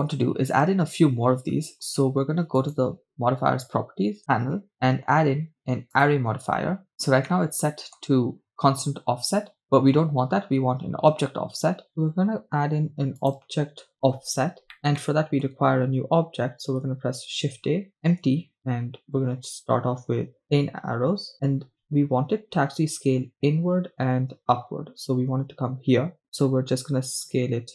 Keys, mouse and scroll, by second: 0.1-0.6 shift+middle drag, 2.0 scroll down 1, 2.6 click, 3.8-4.2 scroll down 2, 4.7 shift+middle click, 4.9-6.1 drag, 6.9-7.3 scroll down 2, 7.3-8.0 middle drag, 11.9 click, 13.4 click, 15.1-16.0 shift+middle drag, 16.8 shift+a, 27.4 s.